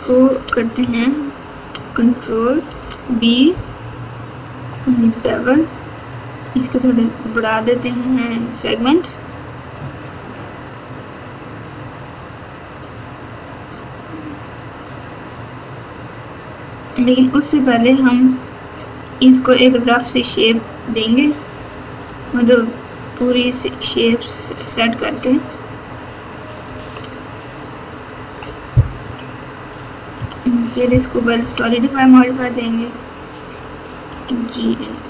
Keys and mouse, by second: 0.7 KP_1, 2.6 ctrl+b, 17.3-18.2 middle drag, 20.1 click, 21.5 g, 25.3 click, 26.7 alt+z, 27.2 click, 29.0 KP_6, 30.1 KP_3, 31.3 KP_1, 34.0 g.